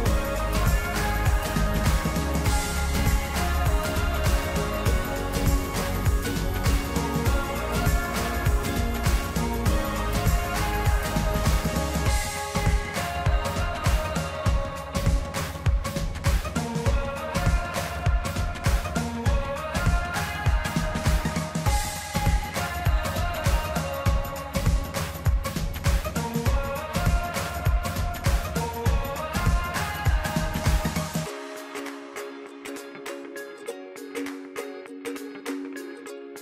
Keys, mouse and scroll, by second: 14.4 Tab, 16.2-16.5 middle drag, 16.7 click, 17.1-20.0 middle drag, 20.0 e, 26.2-29.4 drag, 31.8-32.8 middle drag, 32.8 scroll down 2, 33.3-35.4 middle drag.